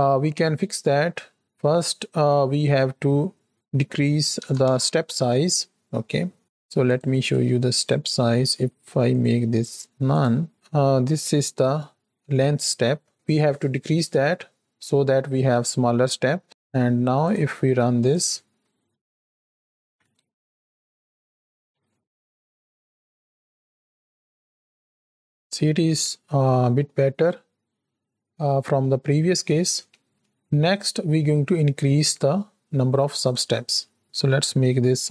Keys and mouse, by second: 0.9 click, 1.4 middle click, 3.5-5.8 drag, 6.8 click, 7.2 click, 7.7 click, 9.2-10.2 drag, 15.9 shift+click, 17.2 click, 17.9 click, 19.7 shift+Right, 19.9 shift+Left, 20.1 space, 21.0-21.7 shift+middle drag, 29.1 shift+middle click, 29.9 space, 33.2-35.1 drag.